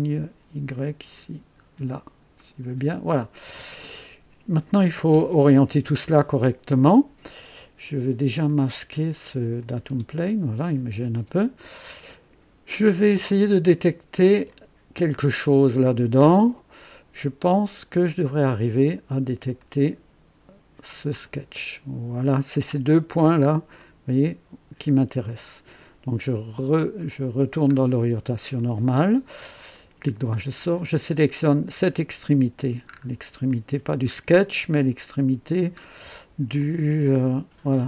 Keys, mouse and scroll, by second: 1.1 click, 2.3 right click, 6.0 scroll up 1, 8.4 click, 9.6 click, 9.9 space, 13.2-15.4 ctrl+alt+drag, 14.5 ctrl+alt+right click, 19.5 click, 21.2 click, 23.3-23.6 scroll up 2, 23.8 right click, 26.9 click, 27.9 scroll down 2, 28.6 right click, 29.7 right click, 31.6 click, 32.8-33.1 scroll up 2, 33.5-34.0 right drag, 34.1 scroll up 2, 35.8 scroll down 2, 36.6-37.8 ctrl+alt+drag.